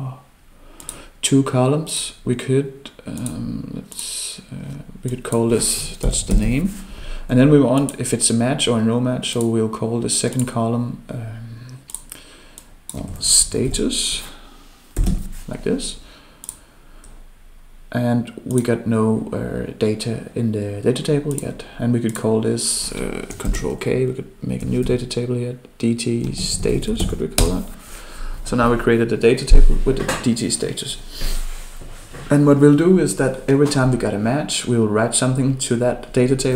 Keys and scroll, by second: 23.5 ctrl+k.